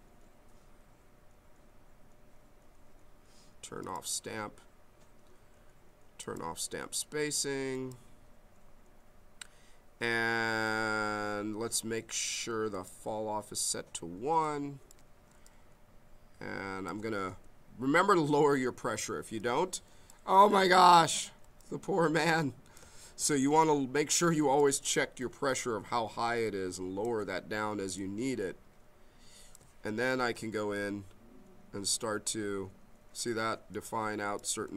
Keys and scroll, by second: 15.3 b, 17.4 m, 23.0 ctrl+z, 25.2 m, 27.9 b.